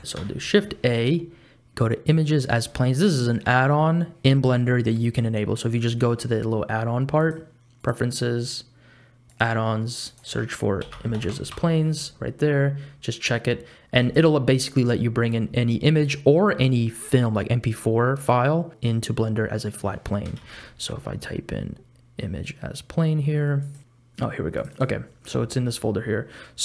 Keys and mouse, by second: 0.2 shift+a, 7.3 click, 20.4 shift+a.